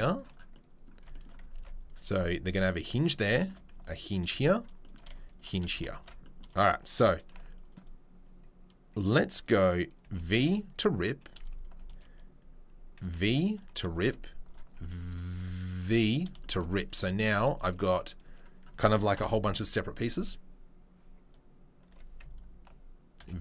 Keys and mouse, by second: 1.5 ctrl+r, 6.0-7.6 alt+middle drag, 7.6 alt+click, 8.1-17.9 middle drag, 13.0 v, 14.4 alt+click, 16.9 3, 17.9 click, 18.2 click, 19.1 ctrl+l, 21.8 middle click, 21.8 2, 22.2 alt+click, 22.7-23.4 middle drag, 23.2 v.